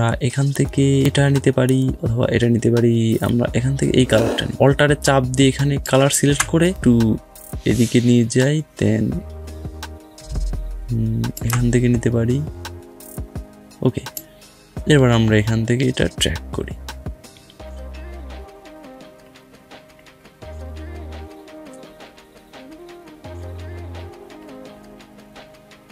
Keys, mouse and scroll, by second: 22.2-24.0 drag.